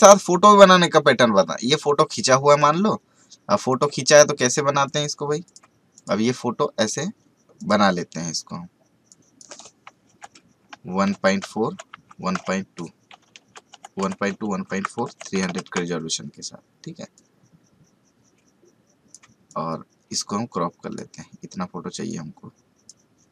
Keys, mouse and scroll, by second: 1.7-3.5 scroll up 1, 3.7 click, 11.9 Tab, 14.6 Tab, 17.1-23.3 drag.